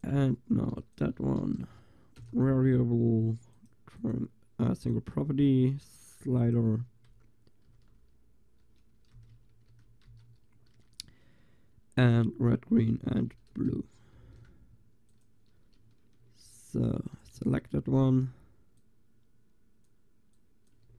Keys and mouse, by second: 3.6-8.3 drag, 9.7 shift+2, 14.2 ctrl+s, 16.3 shift+z, 17.5 shift+z, 20.9 shift+z.